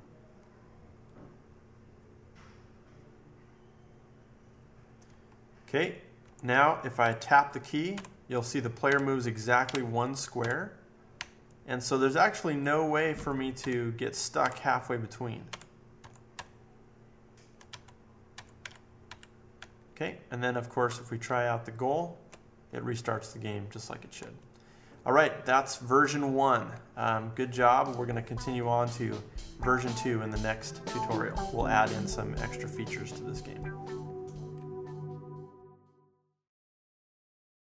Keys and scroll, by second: 5.0 Left, 5.5 Left, 6.2 Left, 7.0 Left, 7.9 Right, 8.8 Right, 9.6 Up, 10.4 Left, 11.1 Up, 11.6 Up, 11.8 Up, 11.8 Up, 12.0 Up, 12.0 Up, 12.1 Up, 12.2 Up, 12.4 Up, 13.1 Left, 13.5 Down, 14.4 Right, 15.4 Right, 16.0 Left, 16.3 Down, 16.8 Down, 17.4-18.6 Down, 17.6 Left, 18.3 Left, 18.6 Up, 19.0 Up, 19.5 Up, 20.0-20.8 Up, 21.2 Left, 21.8 Left, 22.0 Left, 22.2 Left, 23.2 Left, 23.7 Left, 23.8-26.4 Left.